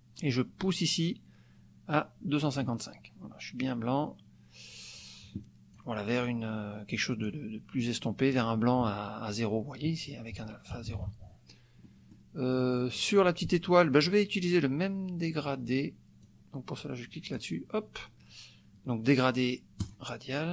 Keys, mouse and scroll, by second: 1.9 click, 3.6-5.9 drag, 7.0 click, 8.3 click, 11.8 click, 13.0 click, 16.2-17.6 drag, 19.8 click.